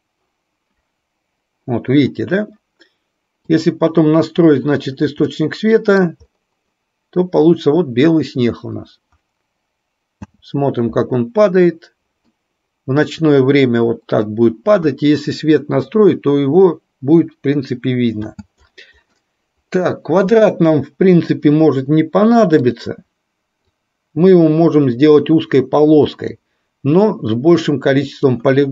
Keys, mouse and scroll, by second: 5.4 middle click, 10.5 space, 12.4-14.4 middle drag, 18.4 space, 19.3-19.9 middle drag, 20.4 click, 23.9-26.5 drag, 27.4-28.5 drag.